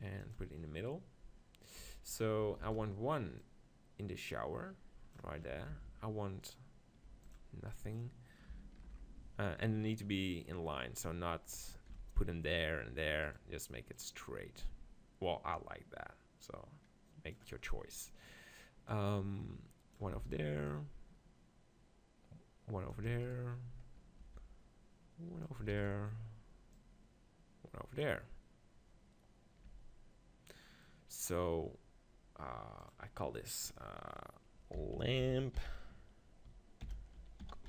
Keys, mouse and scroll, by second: 1.8 Tab, 2.6 shift+d, 2.7-4.6 right drag, 3.4-5.3 drag, 5.4-6.4 middle drag, 5.7 shift+d, 6.5-9.5 right drag, 7.1 x, 8.8 ctrl+l, 9.8-12.6 middle drag, 11.9 shift+d, 13.9-15.8 drag, 17.7-18.9 middle drag, 18.9-22.6 drag, 20.1 shift+d, 20.3-22.3 right drag, 23.1 shift+d, 23.3-25.1 right drag, 24.2 g, 25.6-28.6 drag, 25.7 shift+d, 25.9-27.6 right drag, 29.7 Tab, 30.8-37.6 middle drag.